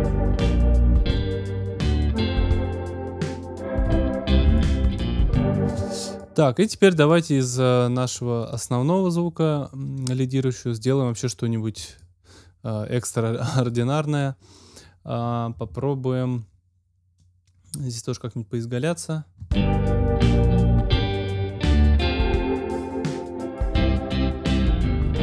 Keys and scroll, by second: 5.6 space, 19.3 space.